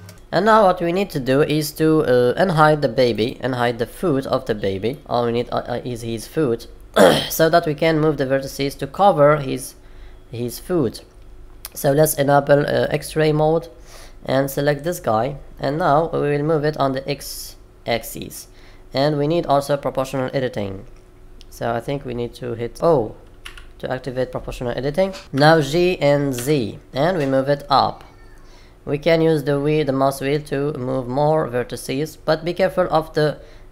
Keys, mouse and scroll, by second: 0.0 shift+middle click, 3.1 click, 4.8 middle click, 12.8 click, 13.5-14.1 scroll up 2, 14.6 click, 22.7 0, 23.4 o, 25.3 g.